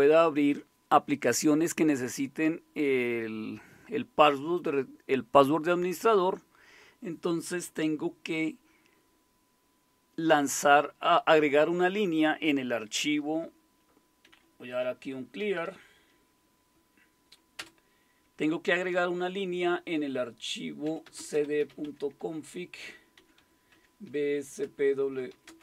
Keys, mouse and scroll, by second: 14.2-16.1 typing, 17.6 typing, 20.6-25.6 typing.